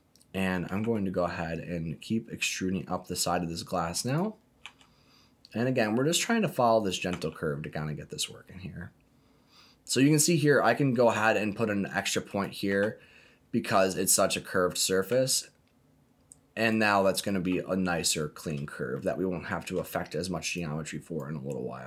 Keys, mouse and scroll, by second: 0.8 e, 4.0 click, 4.6 e, 6.7 click, 7.1 e, 12.2 click, 12.6 e, 14.6 click, 15.0 e, 16.6 click, 18.9 shift+middle click, 20.5 click.